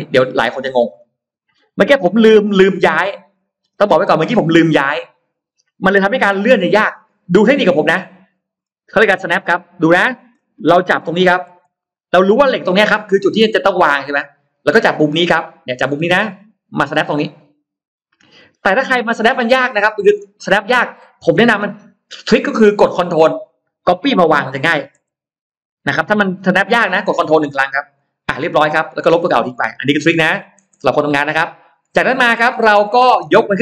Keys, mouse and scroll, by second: 0.1-1.7 scroll up 5, 1.9 middle click, 2.9 middle click, 8.1 middle click, 9.2 middle click, 9.8 middle click, 11.3 m, 11.6 middle click, 11.6 scroll up 1, 14.1 click, 16.1-16.4 scroll down 1, 18.4-18.7 scroll down 1, 19.5 middle click, 19.5 scroll down 1, 27.8 click, 29.1 e, 29.5 click, 30.6 space, 30.9-31.2 scroll up 1, 31.2 middle click, 32.5 click, 32.7-33.6 middle drag.